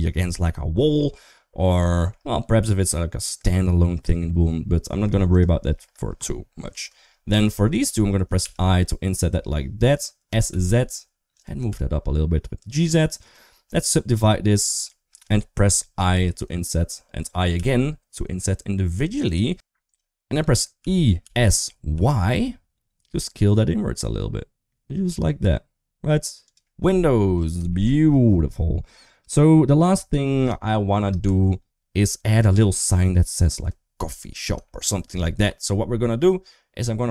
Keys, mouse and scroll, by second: 1.0 middle click, 1.7 shift+middle click, 4.0 middle click, 5.1 shift+click, 5.4 shift+middle click, 7.3 middle click, 8.2 i, 10.1 s, 11.4 g, 13.5 right click, 15.9 i, 19.3 s, 19.7 right click, 20.6 e, 26.8 middle click, 27.5 shift+middle click, 30.6 shift+middle click, 31.1 Tab, 34.4 shift+middle click, 35.2 middle click.